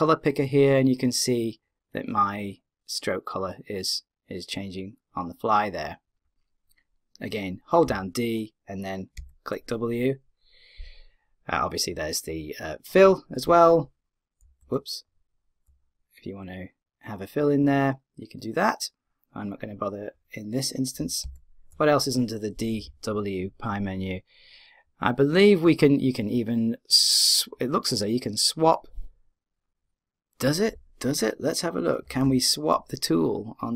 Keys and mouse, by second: 7.8-9.0 d, 9.1 d, 9.1 w, 14.4 d, 14.6 w, 21.0 d, 21.2 w, 32.1 d, 32.2 w.